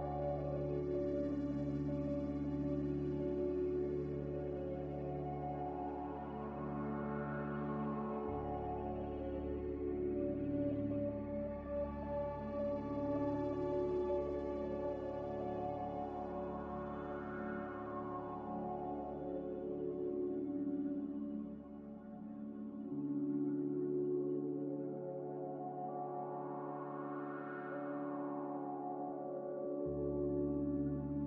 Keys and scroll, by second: 3.9 s, 4.9-5.9 typing, 8.0 Return, 8.5-9.6 typing, 10.7 z, 11.8-12.5 typing, 13.6 typing, 14.8 x, 17.0 a, 27.2 n.